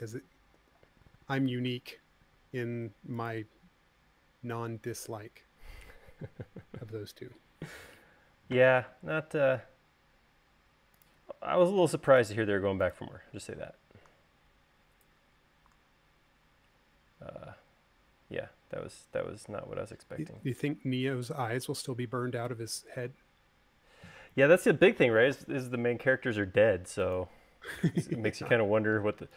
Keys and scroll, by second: 0.8 u, 2.0 u, 19.2 space.